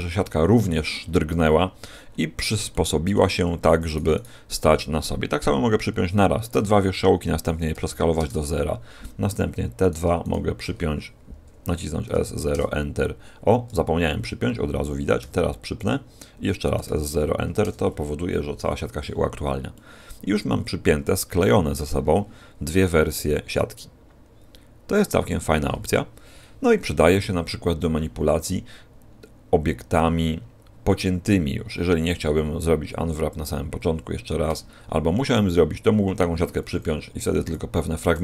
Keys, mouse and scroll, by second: 1.3 scroll down 4, 1.4-2.6 scroll up 7, 2.6 shift+middle click, 2.6 scroll up 1, 3.8 right click, 4.1 shift+right click, 6.5 p, 7.7 s, 9.7 right click, 10.1 shift+right click, 12.0 s, 15.1 p, 16.7 s, 19.7 middle click, 20.5-21.3 scroll down 6, 22.7 middle click, 23.7-24.2 scroll down 1, 24.4 scroll down 1, 36.6 a, 37.3 a.